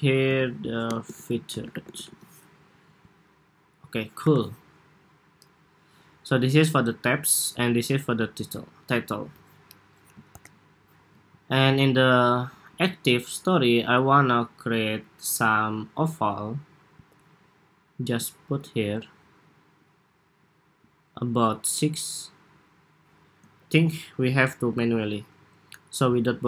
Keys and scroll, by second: 0.0 super+a, 2.2 Home, 3.9 super+-, 10.0 super+=, 11.1 super+s.